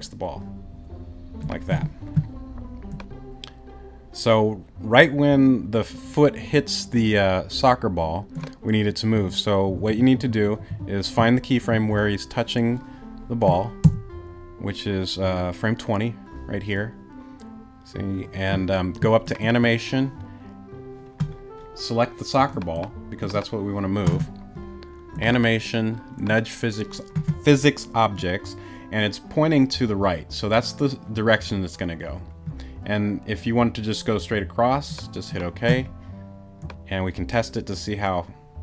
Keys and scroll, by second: 9.1 Right, 13.8 Right.